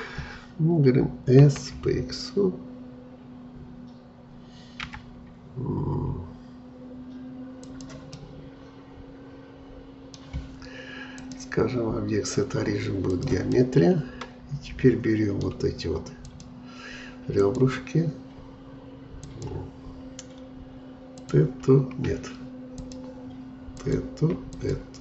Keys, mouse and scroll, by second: 1.4 s, 8.1-11.1 middle drag, 11.1-13.5 drag, 13.5-16.2 middle drag, 16.2-25.0 drag.